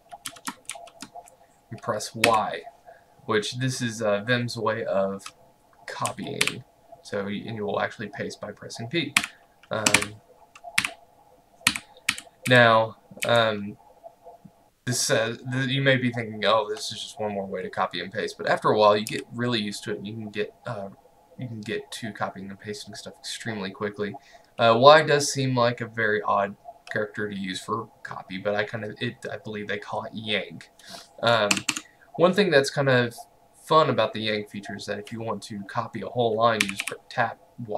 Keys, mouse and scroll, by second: 0.3 v, 0.8 shift+4, 2.1-2.8 typing, 5.9-7.0 typing, 9.2 o, 10.0 Escape, 10.8-13.3 typing, 19.2 k, 31.6 Escape, 36.7 typing.